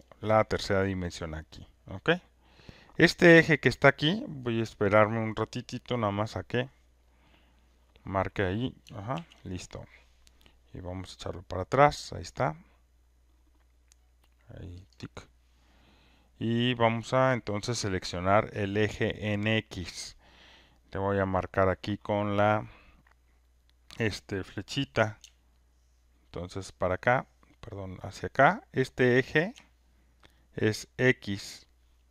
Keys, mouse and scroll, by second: 9.2 ctrl+F1, 10.7-11.3 scroll up 4, 12.5 scroll up 1, 13.2 scroll up 1, 13.9-14.3 scroll, 15.1 click, 17.5 scroll up 6, 29.4 ctrl+shift+click.